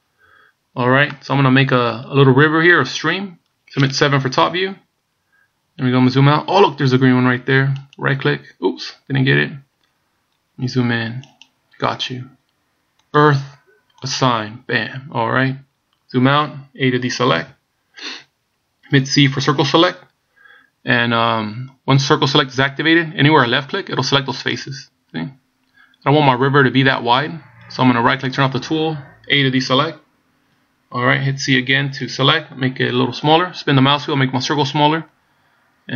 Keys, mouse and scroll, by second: 0.7 scroll down 2, 1.2 middle click, 4.5 KP_7, 6.3-6.9 scroll down 1, 8.0 right click, 10.2 scroll up 2, 11.4 right click, 13.2 click, 14.2 click, 15.1 scroll down 1, 15.8-17.3 scroll down 1, 17.5 a, 19.4 c, 28.3 right click, 30.0 a, 31.6 c.